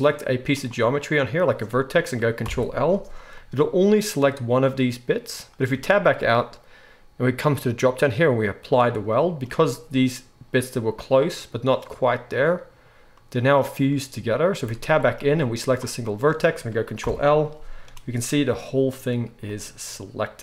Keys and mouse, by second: 0.6-7.6 middle drag, 2.4 ctrl+l, 5.7 Tab, 7.6-15.7 drag, 14.6 Tab, 15.7-20.4 middle drag, 17.0 ctrl+l.